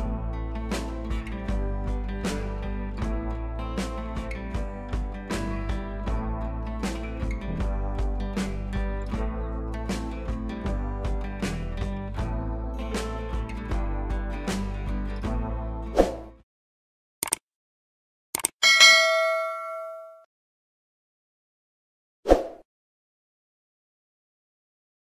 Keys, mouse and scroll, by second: 7.9 click.